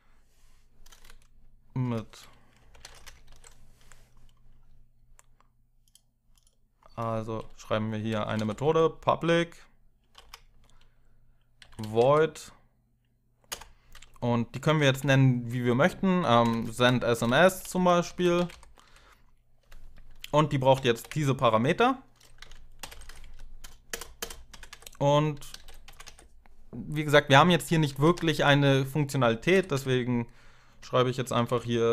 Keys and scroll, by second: 1.6-3.1 typing, 7.5-12.2 typing, 13.2-14.9 typing, 16.2-18.8 typing, 20.7 ctrl+v, 22.6 ctrl+alt+7, 22.6 ctrl+alt+0, 23.0 Left, 23.6 Return, 24.3 Return, 24.3 Up, 24.4 Tab, 25.0-25.9 typing, 27.5-29.8 typing, 30.9-31.9 typing.